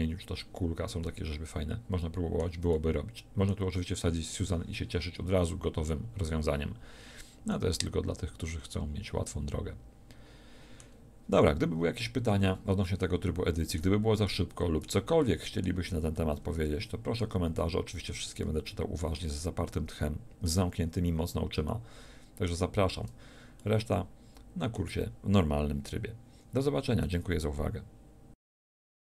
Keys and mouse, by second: 9.8-14.2 middle drag, 28.0-29.1 middle drag.